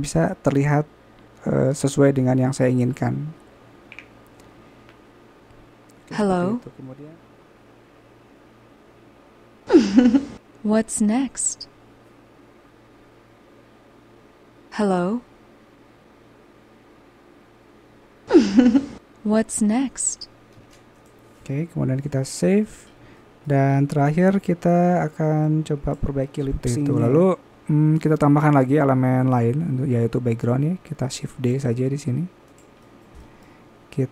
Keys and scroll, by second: 2.5 a, 6.6 alt+a, 19.1 alt+a, 20.3-20.7 typing, 24.0 typing, 26.6 typing, 31.0 typing.